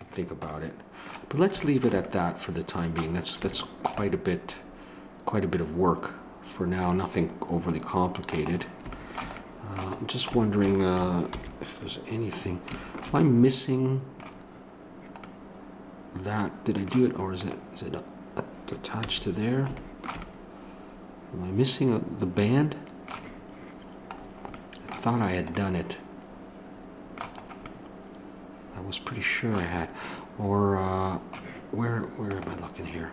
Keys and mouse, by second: 11.3 alt+h, 17.4-33.1 drag, 19.0 a.